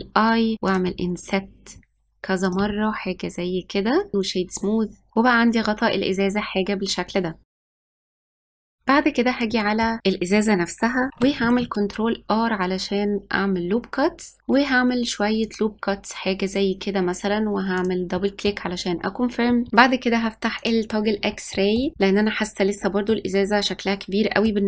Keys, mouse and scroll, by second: 0.5 i, 1.6 i, 3.4 i, 4.1 click, 4.2 right click, 5.1-7.4 middle drag, 7.5 Tab, 7.7 click, 7.9 s, 8.3 s, 8.8 middle click, 9.7 ctrl+r, 17.5 middle click, 18.0-18.9 scroll up 2, 18.9 middle click, 19.5 scroll down 1, 19.7 middle click, 20.5 click, 21.5-24.6 shift+middle drag.